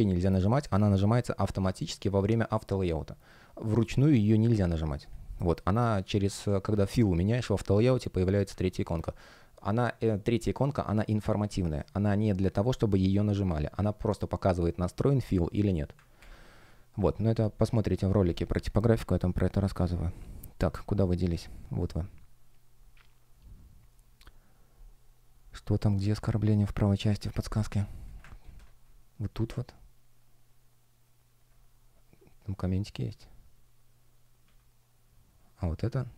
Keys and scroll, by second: 5.0 space, 8.7 super+w, 16.1 super+w, 16.9 F1, 28.4 shift+super+e.